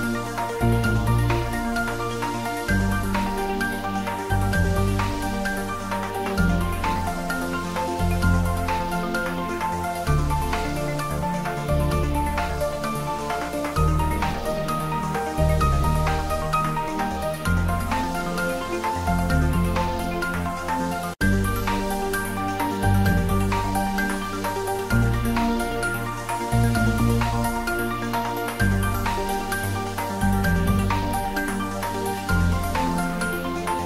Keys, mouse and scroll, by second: 2.7 ctrl+s, 10.2 click, 11.2 shift+right click, 11.7 shift+a, 13.0 click, 13.9 s, 15.2-15.9 typing, 16.7 click, 17.5-18.5 typing, 20.4 click, 22.0 click, 22.6 Tab, 23.7 click, 24.6 shift+z, 24.9 shift+click, 25.4 shift+click, 26.4 ctrl+z, 26.8 shift+click, 27.7 ctrl+z, 28.1 shift+click, 29.1 ctrl+z, 29.8 shift+click, 30.5 shift+click, 31.0-33.3 middle drag, 33.3 middle click.